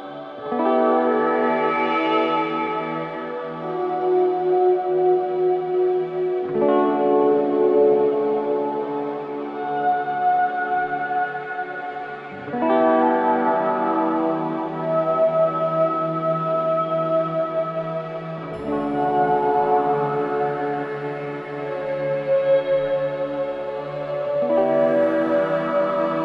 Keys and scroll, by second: 1.2 space, 6.7 space, 14.6 3, 14.7 Return, 15.1 space, 24.9 space.